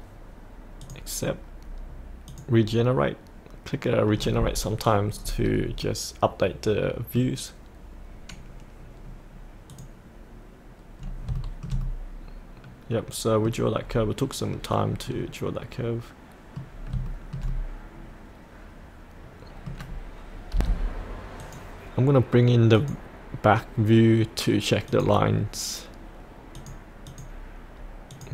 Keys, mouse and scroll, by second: 0.8 click, 5.2-5.9 scroll up 1, 5.9-7.2 middle drag, 9.7 click, 11.0-11.3 scroll up 1, 11.8-13.8 middle drag, 13.8-15.0 scroll down 1, 15.0 middle click, 15.3-16.7 middle drag, 16.7 scroll up 1, 17.1-20.4 shift+middle drag, 20.5 F8, 21.4 click.